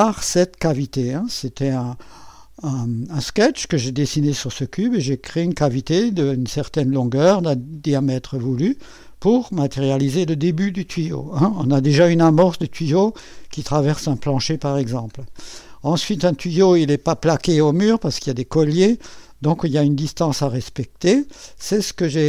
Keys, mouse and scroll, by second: 0.0 click, 3.4 click, 5.7-6.7 drag, 7.3 click, 8.6 click, 10.0 click, 15.1-15.7 scroll down 1, 15.7 click, 20.3 click, 22.0-22.2 drag.